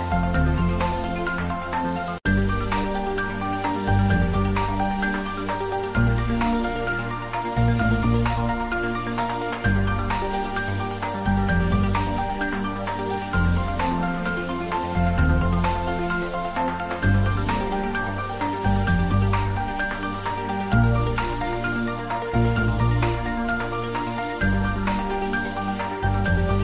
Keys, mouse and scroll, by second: 1.0 ctrl+z, 2.5 click, 2.6 ctrl+z, 2.9-4.7 typing, 3.6 click, 4.4 click, 6.5 click, 6.7 ctrl+middle click, 7.8 shift+middle click, 8.2 ctrl+middle click, 8.8 g, 10.4 click, 10.6 ctrl+s, 10.8 click, 13.1 s, 13.7 click, 14.5 ctrl+s, 15.0 ctrl+click, 15.2 ctrl+right click, 15.6 ctrl+middle click, 16.0 click, 16.9 shift+click, 17.7 ctrl+z, 18.0 shift+click, 18.6 ctrl+z, 19.4-20.9 ctrl+middle drag, 20.9-22.8 typing, 21.3 click, 23.3 click, 24.3 s.